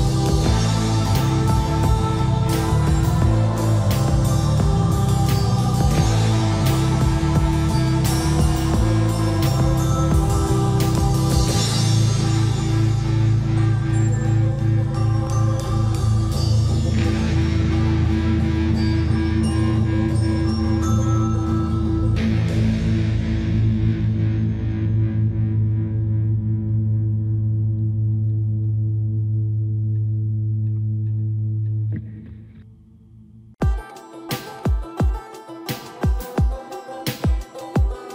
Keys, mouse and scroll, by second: 2.0-3.1 typing, 2.9 click, 4.1-4.4 typing, 6.0-11.1 typing, 11.6-12.0 scroll down 1, 12.4-14.4 typing, 15.9 scroll down 1, 16.4 middle click, 16.7 scroll up 1, 17.2 middle click, 17.8 click, 19.8 v, 20.5 Escape, 20.9 right click, 22.3 click, 22.7 scroll down 1, 23.5 shift+middle click, 24.6 click, 26.5 ctrl+s, 27.3 middle click, 28.0 scroll down 1, 28.4-29.1 scroll up 1, 29.7-38.1 drag.